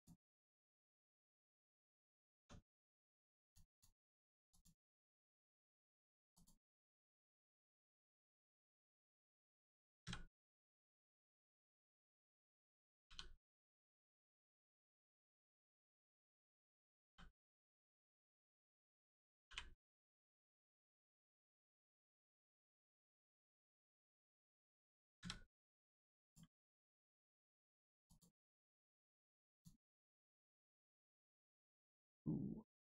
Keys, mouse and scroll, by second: 0.4 middle click, 2.3 Tab, 2.7 click, 3.0 Tab, 3.4 click, 5.1 Tab, 6.0 middle click, 6.2 click, 6.9 s, 7.6 right click, 8.9 scroll down 1, 9.2 click, 10.8 scroll down 1, 11.3 click, 13.6 right click, 14.3 click, 14.8 l, 15.8 click, 17.0 k, 18.0 click, 18.5 l, 20.9 click, 22.7 scroll down 1, 23.0 click, 23.3-23.8 scroll down 1, 23.8 click, 25.1 a, 26.2 click, 26.5 middle click, 28.0 click, 28.4 middle click, 29.4 click, 30.6 scroll up 1, 30.9 shift+middle click, 32.6 click, 32.6 click.